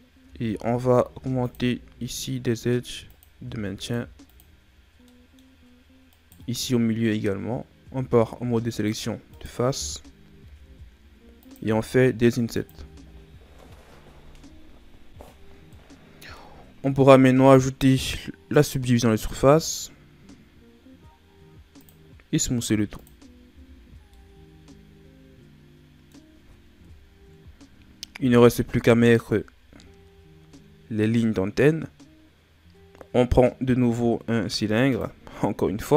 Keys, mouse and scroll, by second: 0.2 Tab, 1.1 ctrl+r, 3.4 ctrl+r, 4.7-5.0 scroll down 3, 5.0 middle click, 5.5-6.0 scroll up 3, 6.0 right click, 7.8 ctrl+Tab, 9.3 right click, 10.4 i, 11.6 i, 12.7 Tab, 13.2 scroll down 4, 15.7-18.5 middle drag, 18.5 click, 21.8 click, 22.5 w, 23.4 a, 23.8 scroll down 4, 24.1-26.8 middle drag, 26.8 KP_1, 28.1 shift+a.